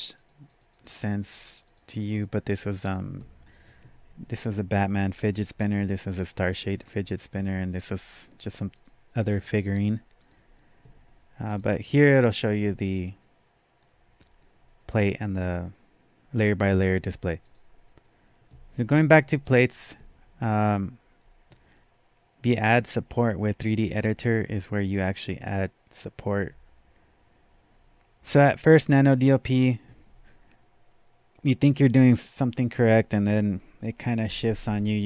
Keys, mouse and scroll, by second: 0.8 click, 1.7 click, 2.0 double click, 2.2 click, 2.9 click, 8.4 click, 8.7 click, 9.2 click, 10.2 click, 11.5-20.1 drag.